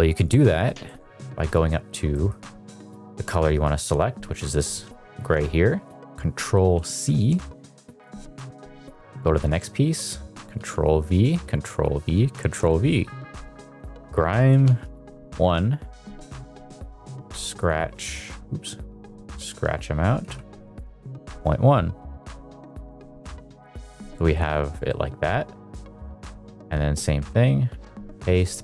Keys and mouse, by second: 0.6 middle click, 1.2 middle click, 1.7 middle click, 2.1 middle click, 6.7 ctrl+c, 8.0 click, 10.6 ctrl+v, 11.4 ctrl+v, 12.3 ctrl+v, 12.8 middle click, 13.8-14.9 drag, 15.9 middle click, 16.4 middle click, 17.6 click, 19.3-21.3 drag, 22.2 shift+middle drag, 22.4 middle drag, 22.7 shift+middle click, 23.3 middle click, 23.7 middle click, 24.2 middle click, 24.9 middle click, 27.6 ctrl+v, 28.2 ctrl+v.